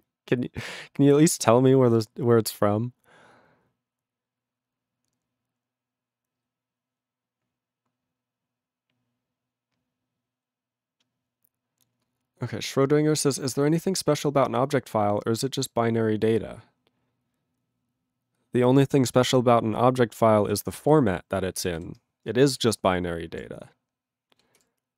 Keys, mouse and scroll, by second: 21.6 ctrl+e, 21.8 ctrl+s, 24.7 ctrl+s.